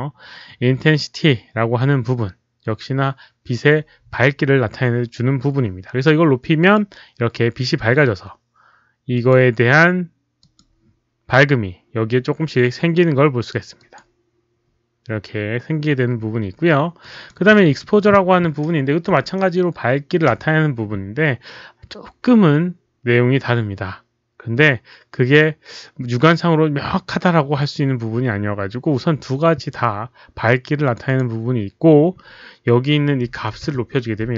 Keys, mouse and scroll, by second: 6.5 click, 9.1 click, 10.5 click, 11.1 click, 13.8 click, 17.2 click, 17.4 1, 19.0 Return, 19.6 click, 20.1 Return, 20.1 click, 20.1 1, 20.1 Return, 20.1 click, 20.1 1, 20.3 Return, 20.3 click, 20.3 1, 25.9 Return, 29.9 Return, 30.8 click, 30.9 Return, 31.0 click, 33.2 KP_1, 33.5 KP_0, 33.6 Return.